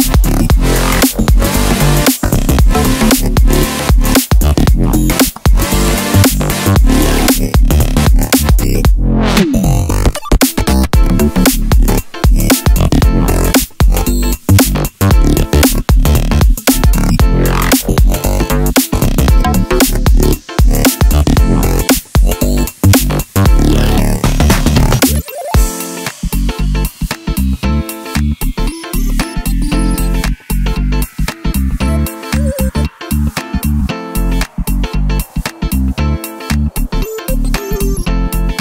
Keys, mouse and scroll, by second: 0.2 e, 0.9 click, 1.3 e, 1.7 click, 2.3 click, 2.4 e, 2.8 click, 3.8 click, 3.8 scroll up 1, 4.0 i, 4.5 scroll down 1, 4.7 scroll up 1, 5.3 click, 5.3 i, 6.6 scroll down 1, 6.8 Tab, 8.8 scroll up 1, 9.0 Tab, 9.7 click, 9.8 l, 10.2 KP_1, 10.5 scroll up 1, 10.6-12.0 shift+middle drag, 11.0 shift+d, 12.0 click, 12.1 shift+d, 12.6 click, 12.7 middle click, 13.3-14.0 scroll down 4, 13.4 Tab, 13.6 click, 14.0 middle click, 14.6 click, 15.0 click, 15.1-15.8 drag, 15.9-17.5 middle drag, 17.1 ctrl+s, 17.5 click, 24.5-32.2 middle drag, 29.7 KP_1, 30.4 alt+d, 32.2 click, 33.2 s, 34.1 KP_Enter, 34.7 middle click, 35.0 scroll down 2, 35.1 click, 35.3-37.0 middle drag, 36.9 scroll down 2, 37.0 click, 37.2-38.6 middle drag, 37.4 r.